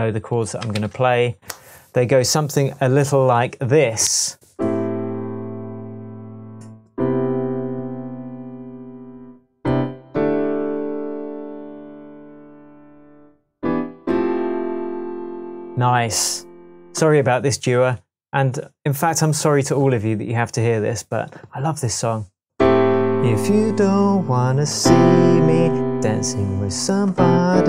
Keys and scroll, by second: 0.7 super+s.